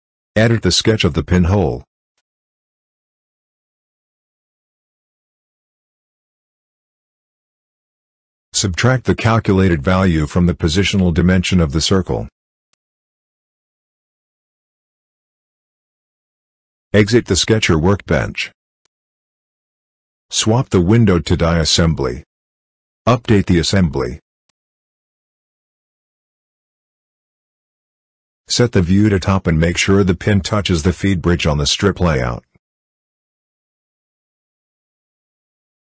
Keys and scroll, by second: 10.9 -, 11.9 ctrl+v, 13.9 Return.